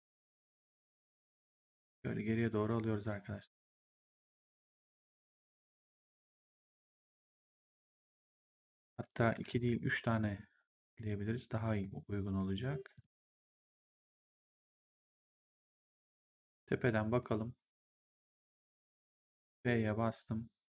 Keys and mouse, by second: 0.2 w, 1.9 click, 8.8 ctrl+z, 10.8 click, 12.9 shift+click, 17.0 right click, 18.4 click, 19.1 f.